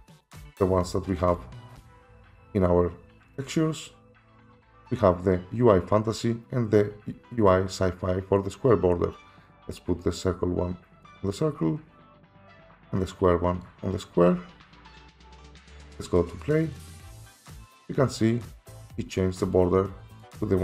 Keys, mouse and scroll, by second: 1.4 click, 3.4 click, 3.5 click, 9.2 click, 11.0 click, 13.6 click, 15.6 click, 16.8 click, 20.2 click.